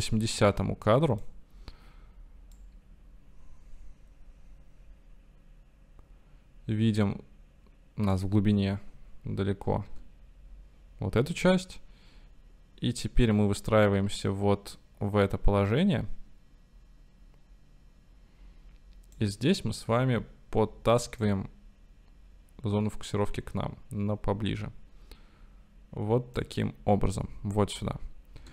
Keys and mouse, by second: 2.7-8.4 right drag, 10.2 i, 12.0-20.2 right drag, 21.3-26.8 right drag.